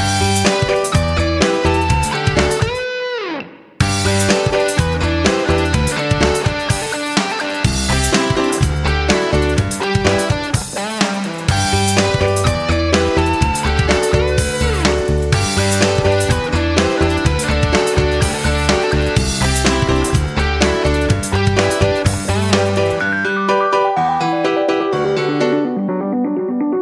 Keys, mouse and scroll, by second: 22.1 shift+Right, 23.0 Left, 23.4 d.